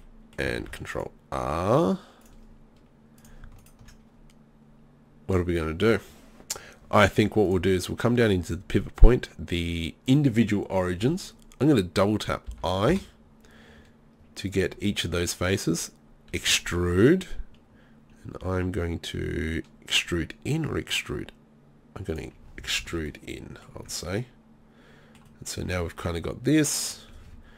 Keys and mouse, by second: 0.6 ctrl+r, 12.5 i, 15.0 click, 16.4 e, 22.6 z, 22.8 z, 23.8 Tab.